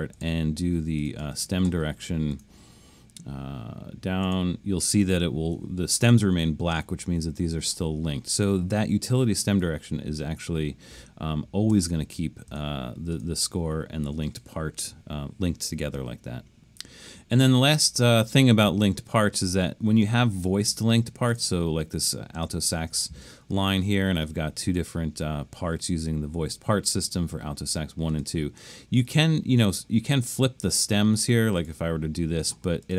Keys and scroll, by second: 11.7 super+z.